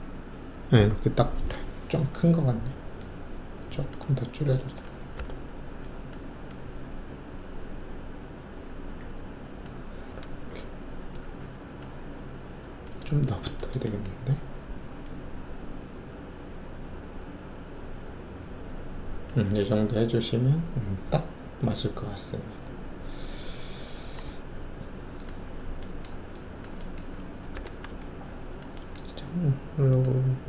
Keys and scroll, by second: 5.1 r, 9.9 w, 27.5 alt+4.